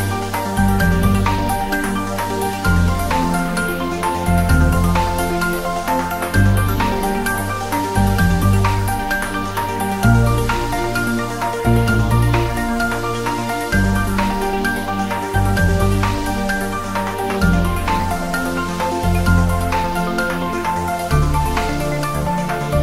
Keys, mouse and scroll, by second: 0.2 click, 0.5 right click, 0.9 click, 1.5-2.7 scroll down 3, 1.8 click, 2.3 click, 2.7-4.3 drag, 5.1 Right, 6.4 Return, 7.6 click, 7.7-8.1 scroll down 1, 8.1 click, 8.9-10.8 drag, 10.8 g, 12.8 click, 13.0 s, 13.8 click, 14.8 click, 15.4 ctrl+z, 15.9 g, 16.9 click, 17.6 scroll up 1, 18.3 g, 18.4 Right, 18.8 Up, 19.3 Right, 20.8 click, 21.8 scroll down 1, 22.3 g.